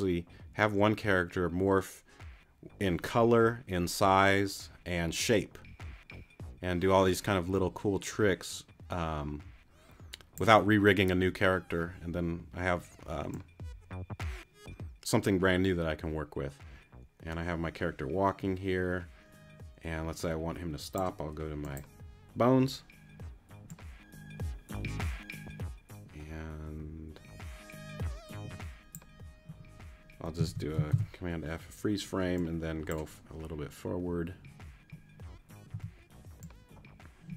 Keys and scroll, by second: 30.5 super+a, 30.9 super+f, 35.7 t.